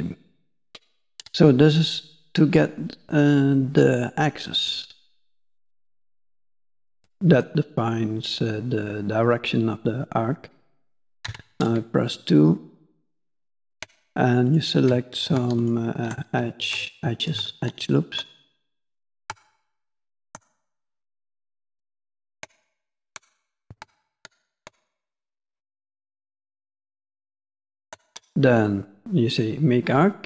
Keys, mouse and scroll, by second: 4.4 click, 6.9 middle click, 11.2 2, 12.1 click, 13.3 ctrl+click, 14.5 shift+click, 15.6 ctrl+click, 16.6 shift+click, 17.6 ctrl+click, 18.6 shift+click, 19.8 ctrl+click, 20.9 shift+click, 21.9 ctrl+click, 23.0 shift+click, 24.2 ctrl+click, 25.6 shift+click, 26.3 shift+middle click, 27.5 ctrl+click.